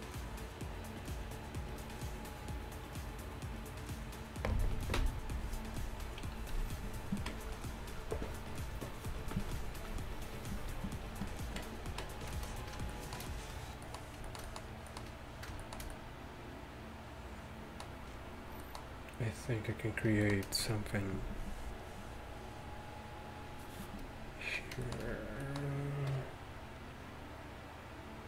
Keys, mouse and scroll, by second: 13.0-14.3 middle drag, 24.7-26.4 middle drag.